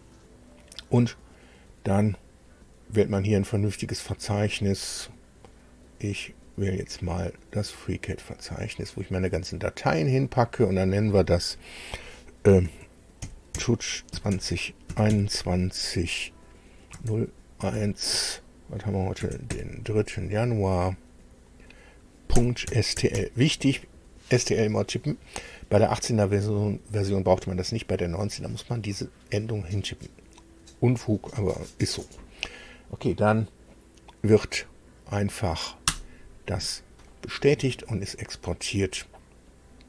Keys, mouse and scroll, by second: 3.9 click, 4.9 scroll down 2, 5.4-6.1 scroll down 4, 7.1 scroll down 2, 8.4 click, 10.3 click, 12.1-14.6 typing, 16.4 KP_0, 17.2 KP_1, 18.7 KP_0, 19.0 KP_3, 21.6-23.2 typing, 35.4 Return.